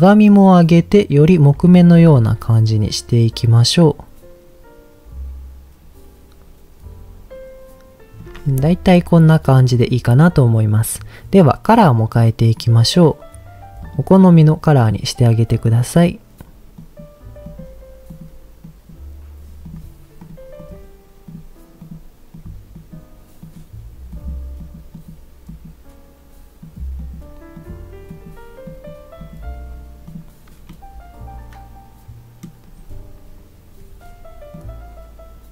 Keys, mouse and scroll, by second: 0.3-1.4 drag, 2.2-8.2 shift+drag, 12.5 click, 19.6 click, 20.2 click, 30.0 click, 30.6-32.5 middle drag, 34.5-35.5 drag.